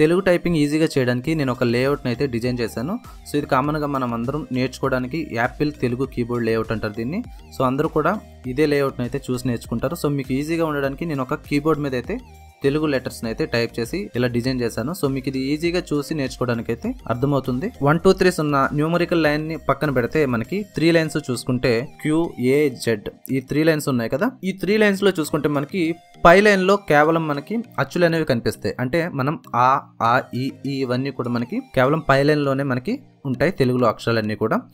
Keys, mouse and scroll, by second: 3.4 ctrl+Right.